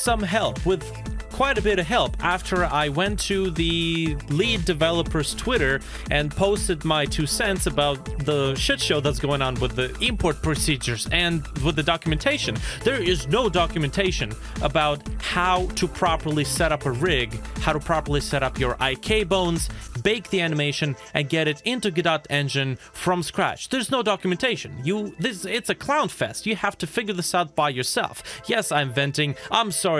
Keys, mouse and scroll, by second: 1.3 i, 1.4 i, 3.3-4.5 typing, 4.9 Return, 10.9-11.6 scroll down 1, 11.6 middle click, 27.5 shift+middle click.